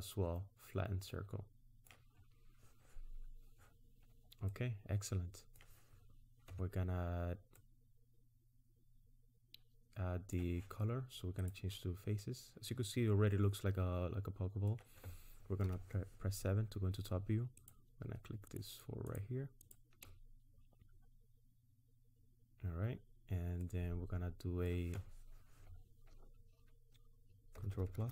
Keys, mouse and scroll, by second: 4.2-4.5 scroll down 1, 4.5 middle click, 6.5 Tab, 7.6 middle click, 11.5 click, 12.2 middle click, 15.6 KP_7, 17.6 click, 18.5 shift+click, 19.1 shift+click, 23.6 middle click, 27.6-27.9 ctrl+KP_Add, 28.0 ctrl+KP_Add.